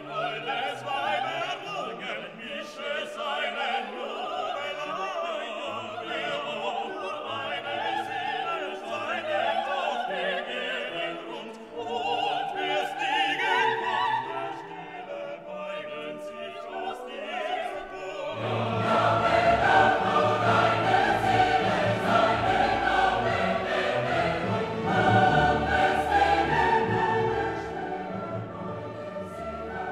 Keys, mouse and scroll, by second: 3.9 click, 4.0-22.9 drag, 26.3-29.9 drag.